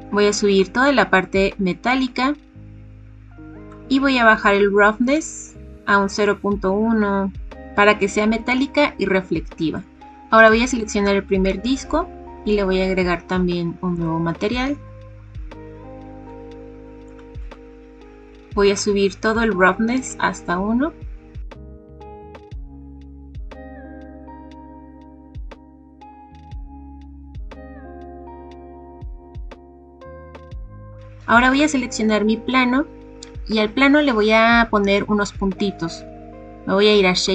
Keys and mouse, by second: 0.6 click, 1.6 click, 3.6 click, 4.3 click, 6.6 click, 9.9 typing, 10.4 click, 13.9 click, 17.1 click, 18.7 click, 21.6 click, 24.2 click, 26.2 click, 29.7 click, 30.3 click, 30.8 click, 31.5 click.